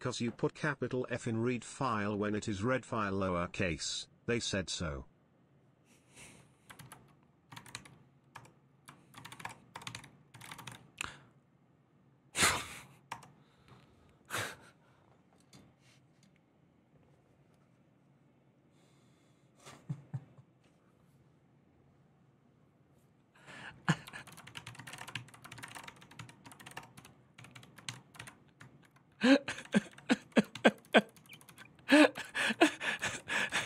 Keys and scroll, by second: 6.6 alt+{, 7.0-10.9 typing, 8.1 Return, 9.2 Return, 12.9 Return, 23.9 ctrl+w, 24.0 j, 24.2 ctrl+w, 24.3 ctrl+o, 24.4 ctrl+c, 24.6 ctrl+:, 24.7 Return, 24.9 ctrl+n, 25.1-33.6 typing, 25.9 ctrl+t, 32.8 ctrl+c.